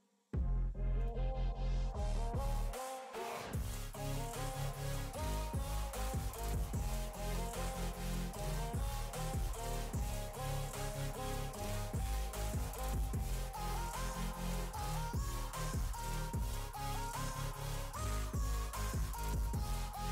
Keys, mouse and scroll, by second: 1.9 click, 2.3 click, 4.2 click, 5.5-9.2 drag, 17.7-20.1 drag.